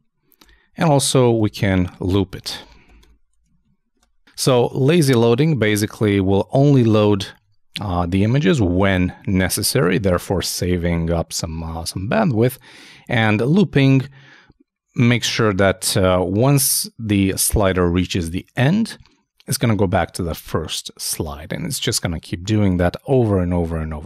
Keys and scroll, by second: 2.0-2.9 typing, 3.4 super+e, 3.9 super+Tab, 4.8 super+r.